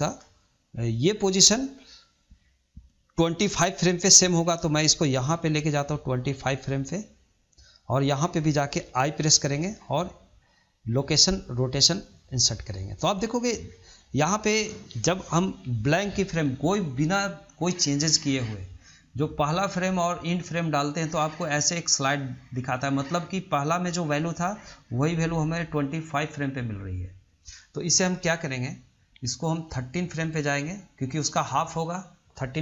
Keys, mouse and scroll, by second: 4.3-7.4 drag, 17.9-20.9 drag, 29.2-32.2 drag.